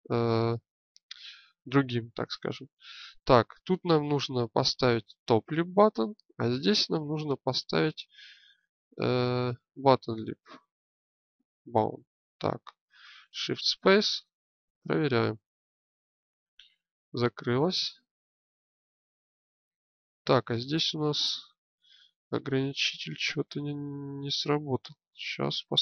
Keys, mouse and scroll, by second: 13.0 shift+space, 25.2 alt+g.